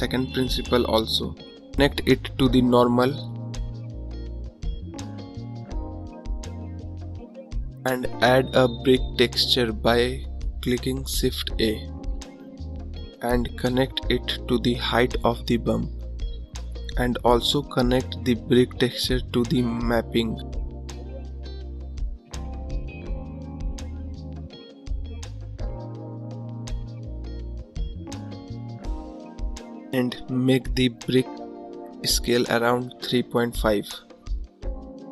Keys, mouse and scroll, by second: 5.4 click, 15.5 click, 23.7-25.3 drag, 29.2-35.1 drag.